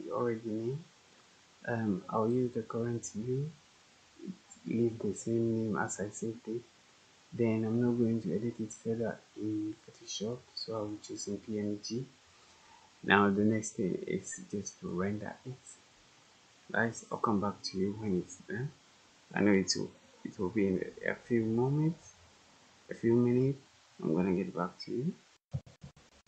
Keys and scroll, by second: 25.3 F8, 25.7 F8.